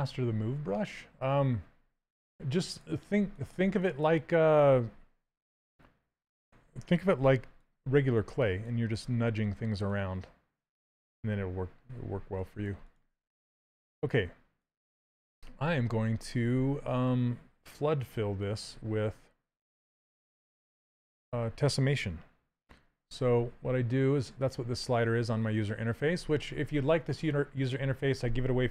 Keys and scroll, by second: 6.9 s.